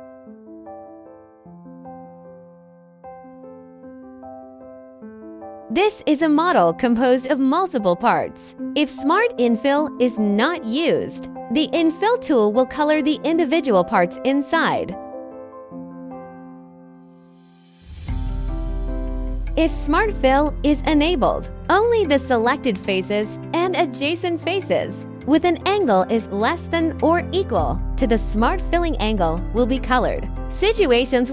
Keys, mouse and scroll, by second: 0.1 scroll, 0.7 click, 1.0 scroll, 1.9 click, 3.1 click, 14.3 click, 17.7 click, 21.3 click, 22.0 click, 24.3-24.7 scroll, 25.5 scroll, 25.5 click, 26.9 click, 29.1 click.